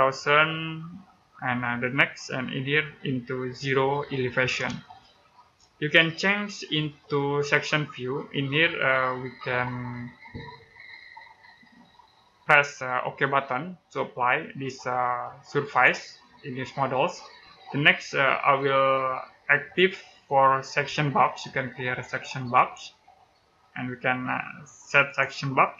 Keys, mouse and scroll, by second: 4.7 middle click, 6.5 scroll down 1, 15.5 click, 17.9-21.9 scroll down 1, 22.4 click, 25.4 middle click.